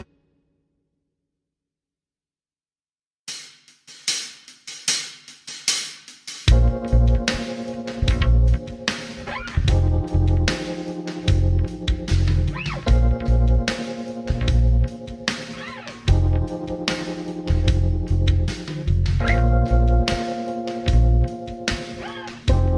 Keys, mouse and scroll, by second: 1.4 click, 1.7 middle click, 2.3-3.1 scroll up 2, 3.1-5.8 middle drag, 6.2 scroll down 2, 7.7 g, 10.7 click, 11.0 g, 13.9 click, 14.7 g, 15.9 click, 16.3-20.2 middle drag, 16.9-17.5 scroll down 2, 20.2 s, 21.8 click.